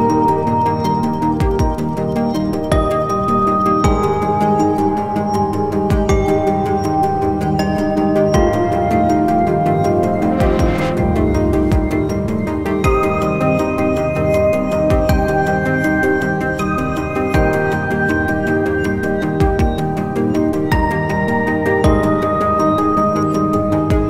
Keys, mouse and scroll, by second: 10.6-11.4 scroll down 1, 11.4 scroll down 1, 11.5-12.2 scroll up 1, 12.2 scroll up 1, 12.3 alt+click, 16.8 shift+right click.